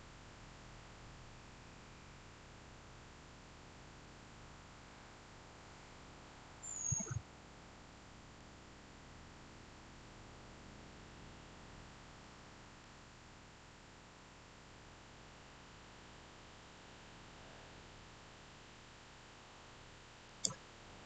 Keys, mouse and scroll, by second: 6.3-6.7 scroll up 1, 6.7-7.8 scroll down 1, 7.8-9.2 middle drag, 9.2-10.9 scroll up 1, 12.1-14.9 middle drag, 20.2 click.